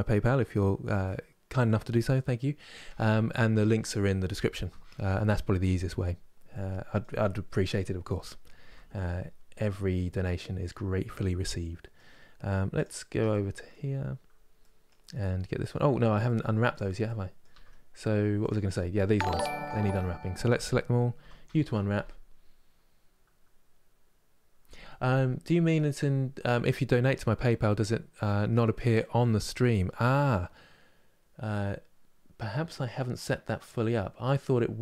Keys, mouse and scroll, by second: 6.2-6.9 scroll down 1, 6.9-8.3 middle drag, 8.3 n, 8.8-9.4 scroll up 2, 9.4-12.5 middle drag, 12.5 click, 12.8 Tab, 13.0 middle click, 13.6 scroll up 4, 14.3-15.5 middle drag, 15.5 scroll down 2, 16.0-17.2 middle drag, 17.2 Tab, 18.1 click, 18.4 middle click, 19.1 Tab, 19.5 a.